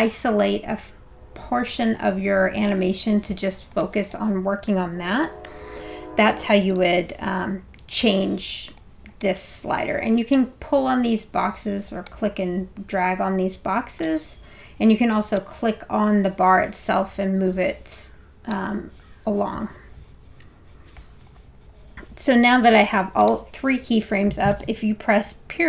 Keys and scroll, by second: 5.1 5, 5.5 0, 6.7 Return.